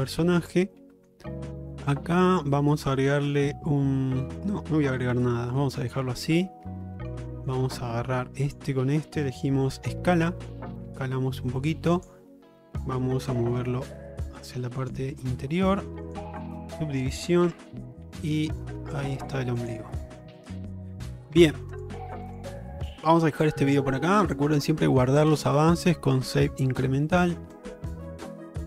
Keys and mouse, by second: 0.8 middle click, 1.8 shift+middle click, 5.2 3, 5.9 click, 6.4 middle click, 7.3 middle click, 8.5 shift+click, 9.9 s, 13.3 click, 13.6-15.0 drag, 16.1 click, 17.5 Tab, 18.5 shift+middle click, 20.4 shift+middle click, 21.4 q, 22.9 middle drag, 23.6 middle drag, 25.4-28.6 drag.